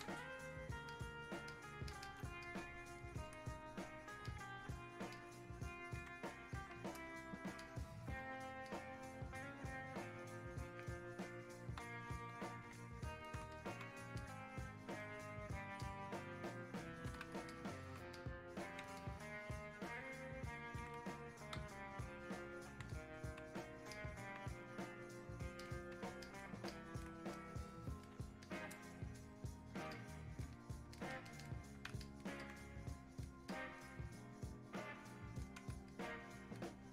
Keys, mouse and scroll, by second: 2.5-4.3 shift+drag, 4.3 alt+click, 5.2-6.6 drag, 6.6 alt+click, 7.6 ctrl+click, 8.7-11.9 shift+drag, 11.9 shift+click, 13.1 shift+click, 14.2-15.8 ctrl+drag, 15.8-17.5 drag, 17.5 alt+click, 18.2 click, 19.0-22.9 ctrl+drag, 22.9 click, 24.0 alt+click, 26.7-28.5 drag, 28.5-31.0 drag, 31.0 ctrl+click, 32.0 alt+click, 33.5-35.9 drag, 35.9-36.9 alt+drag.